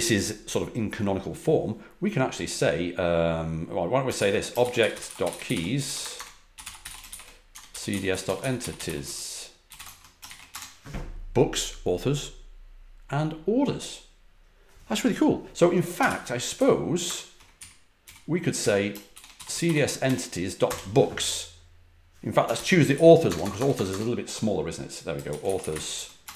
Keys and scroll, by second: 3.7-10.2 typing, 10.5 Return, 15.7-17.5 typing, 17.5 Page_Up, 18.0 Page_Up, 18.5-20.5 typing, 20.6 Return, 22.5 ctrl+l, 22.9 Page_Up, 23.2-23.8 typing, 25.0-26.2 typing, 26.2 Return.